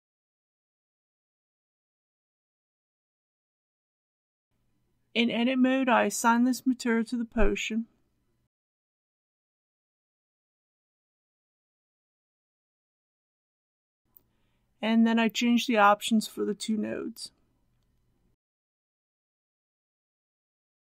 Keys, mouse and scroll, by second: 0.7 ctrl+v, 1.1 click, 3.6 middle click, 5.5 Tab, 7.3 click, 8.1 Tab, 9.4 middle click, 10.9 KP_7, 12.0-12.4 scroll up 1, 16.0 click, 16.7 KP_1, 16.9 KP_5, 20.6 middle click.